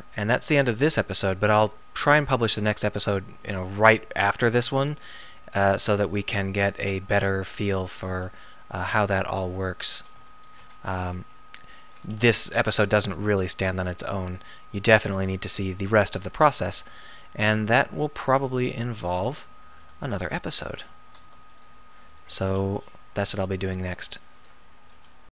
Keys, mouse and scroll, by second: 2.0 r, 2.9 g, 6.1 r, 6.8-7.2 drag, 7.2 g, 10.0 s, 13.0 r, 14.4 g, 20.3 s, 22.5 s, 23.7-25.3 middle drag.